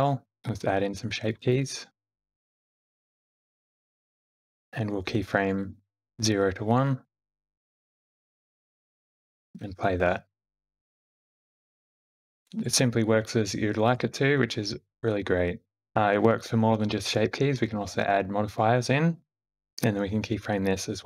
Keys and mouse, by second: 1.1 click, 1.4 click, 2.0 Tab, 2.0 s, 4.6 Tab, 7.1 click, 9.4 shift+Left, 9.4 g, 9.4 space, 15.6 space, 15.9 ctrl+z, 16.6-18.4 drag.